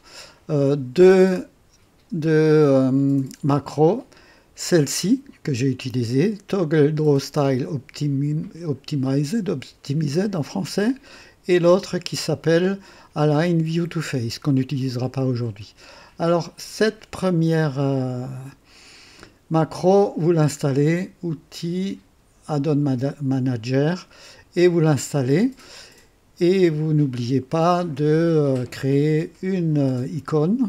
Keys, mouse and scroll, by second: 21.3 click, 25.4 click.